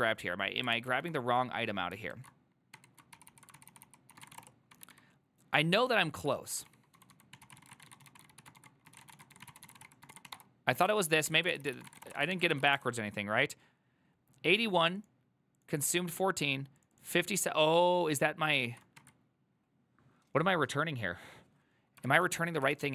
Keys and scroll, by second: 1.0 alt+{, 2.2 ctrl+a, 2.8 1, 3.2 ctrl+c, 3.4 ctrl+c, 3.6 ctrl+c, 3.8 ctrl+c, 4.1-5.3 typing, 6.6-12.5 typing, 12.6 ctrl+c, 12.8 Up, 12.8 Return, 19.1 1, 22.8 ctrl+u.